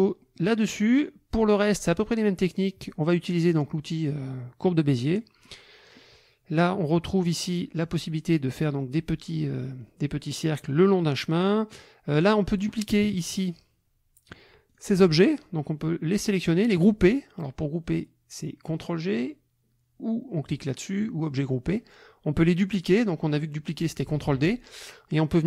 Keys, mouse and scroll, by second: 0.2 middle click, 5.0 click, 5.4 click, 11.3 click, 12.1 click, 13.0 KP_Subtract, 14.7 click, 15.3-16.4 drag, 20.5 click, 24.2 ctrl+d, 24.6-25.4 ctrl+drag.